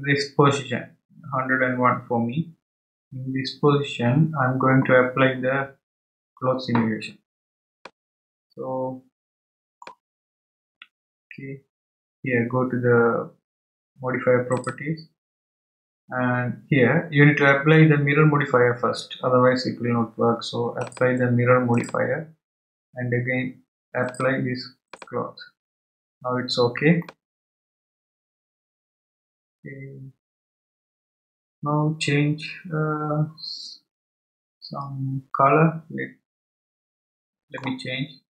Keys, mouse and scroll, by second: 7.8-10.8 middle drag, 14.5 click, 20.8-23.8 drag, 24.0-27.0 drag, 27.0-30.1 middle drag.